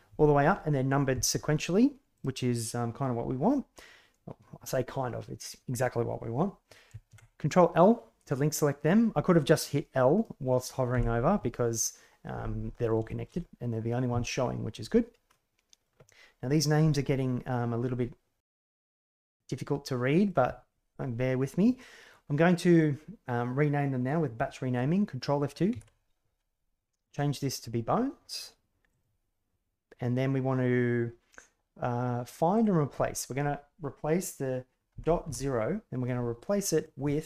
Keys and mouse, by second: 2.1 right click, 7.0 ctrl+l, 13.1 shift+click, 15.3-15.8 drag, 18.6-20.2 drag, 25.7 ctrl+F2.